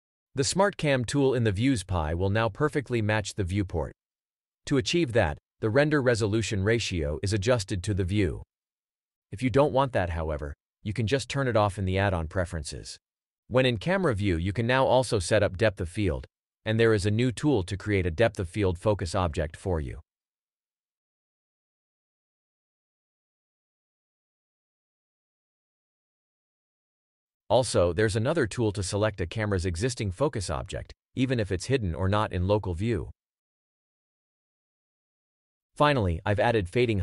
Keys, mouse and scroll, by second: 0.0 Page_Down, 2.9 alt+click, 14.2 Page_Down, 16.6 Page_Down, 25.5-25.9 ctrl+drag, 28.0 Page_Down, 34.8 ctrl+click, 34.8 g.